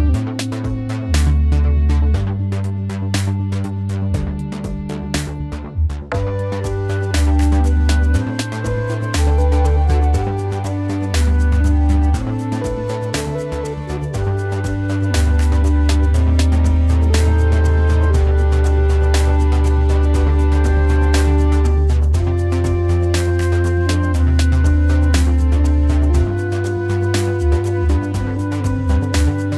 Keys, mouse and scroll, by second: 2.6 shift+click, 11.2 alt+click, 18.3 ctrl+z, 26.5 shift+click, 28.5 shift+click.